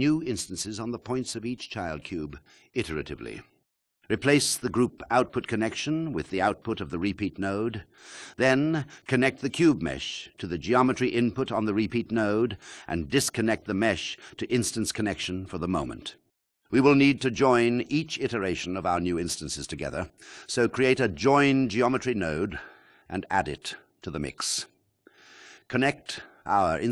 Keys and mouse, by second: 0.6 click, 1.2-2.8 drag, 4.2-14.8 drag, 15.8-18.3 drag, 18.8 shift+a.